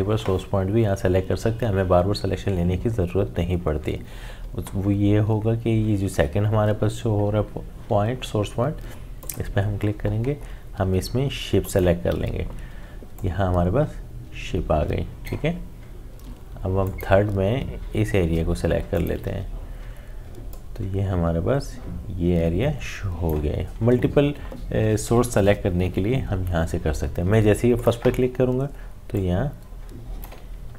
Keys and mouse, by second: 9.2-25.5 drag, 27.8-30.7 drag, 30.6 z.